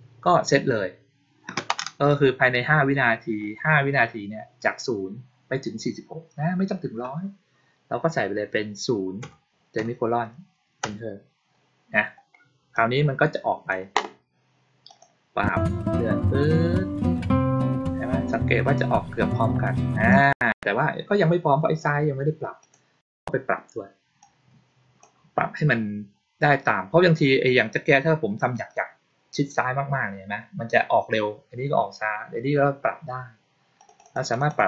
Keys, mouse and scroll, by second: 12.7-13.6 drag, 14.8 click, 20.0 click, 22.5 click, 24.1-24.9 drag, 33.7 click, 33.9 click, 34.1 click, 34.2 click, 34.4 click, 34.6 click.